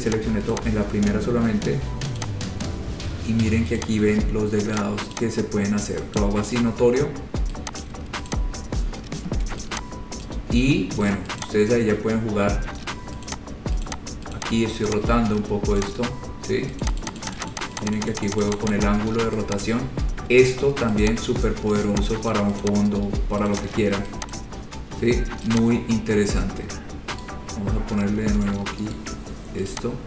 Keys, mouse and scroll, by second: 0.3 click, 0.7 click, 2.4 click, 4.0 click, 5.0 click, 5.3 click, 6.4 click, 7.3 scroll, 8.1 click, 8.5 click, 8.9-9.3 scroll, 10.5 click, 11.6 click, 13.5 click, 14.1 click, 14.6 click, 15.1 click, 16.0 click, 17.1 click, 17.2 click, 17.4 click, 17.6 click, 17.7 click, 17.9 click, 18.0 click, 18.2 click, 18.3 click, 18.5 click, 18.7 click, 18.8 click, 19.9 click, 20.3-20.7 scroll, 21.3 click, 22.6 click, 22.9 click, 23.7 click, 23.7-24.3 scroll down 4, 24.6 click, 25.8 click, 27.5 right click, 29.2 right click, 29.9 click.